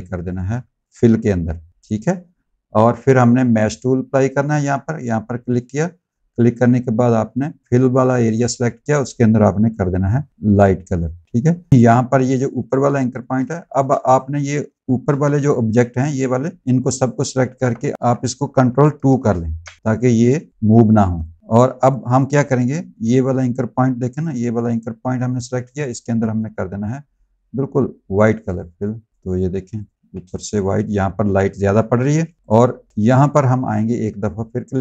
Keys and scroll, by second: 0.2 ctrl+z, 1.2 x, 11.7 a, 13.3 space, 13.8 z, 14.9 v, 17.4 BackSpace, 17.9 ctrl+z, 19.2 ctrl+2, 21.0 space, 22.4 a, 29.4 z, 30.1 space, 32.0 v, 32.7 space.